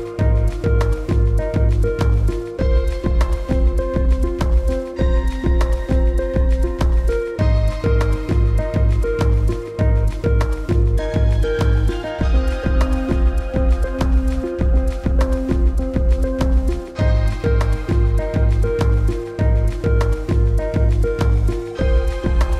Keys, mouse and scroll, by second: 0.0 click, 0.4 alt+scroll up 1, 0.6 click, 0.9 t, 1.2 click, 2.0 d, 2.8 click, 3.5-5.0 typing, 5.3-6.7 scroll down 1, 9.4 click, 11.2 click, 14.9 o, 15.8 x, 16.0 click, 16.3 scroll up 1, 16.6 click, 20.2-20.6 alt+scroll up 2, 21.6 Down.